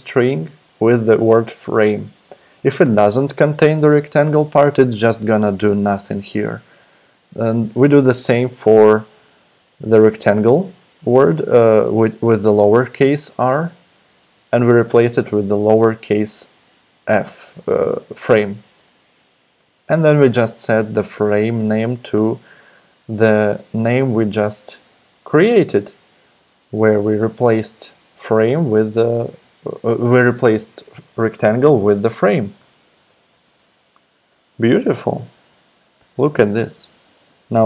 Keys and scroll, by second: 33.4 super+Tab, 34.8 super+z, 36.0 alt+super+p, 36.7 super+z.